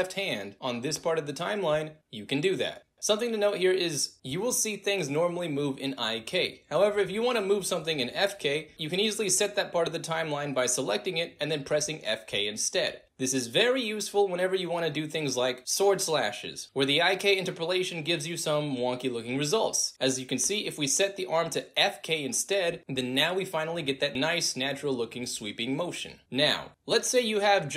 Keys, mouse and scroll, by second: 1.4 f, 3.2-3.9 alt+drag, 4.1 alt+middle drag, 5.2-6.4 drag, 6.8 space, 8.7 alt+right click, 8.9 alt+middle drag, 10.1-18.2 drag, 19.0-20.1 drag, 21.7 click, 22.7 drag, 23.6 alt+middle drag, 25.1-25.4 drag, 25.6 space, 26.7 drag, 27.0 space.